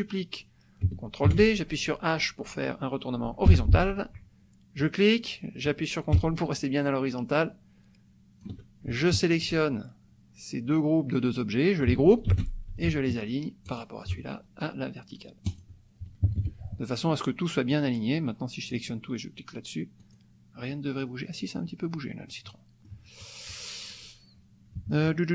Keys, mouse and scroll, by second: 1.3 ctrl+d, 3.5 h, 4.8-8.9 drag, 9.2 shift+click, 12.3 ctrl+g, 13.7 shift+click, 15.5 click, 16.3 -, 17.7-18.9 drag, 20.0 click, 22.3 click, 23.9 click, 24.7 KP_Subtract.